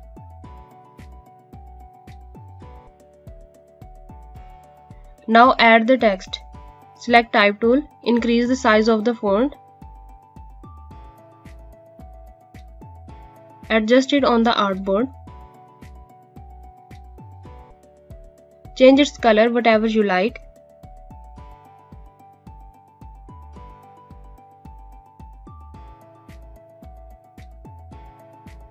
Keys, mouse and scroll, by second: 3.3 alt+Num_Lock, 3.5-4.7 scroll up 1, 7.2 click, 9.9 click, 11.2-13.4 typing, 13.5 click, 20.7 click.